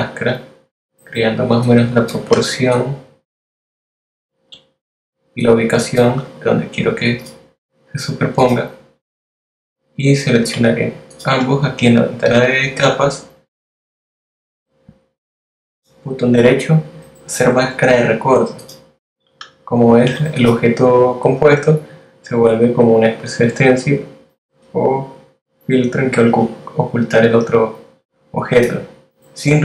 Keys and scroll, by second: 19.1 z.